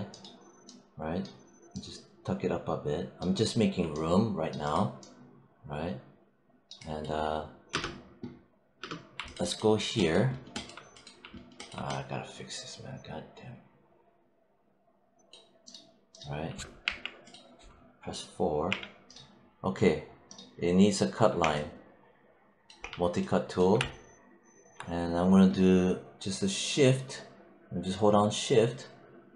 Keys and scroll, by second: 7.6 space, 16.7 alt+5, 18.5 4.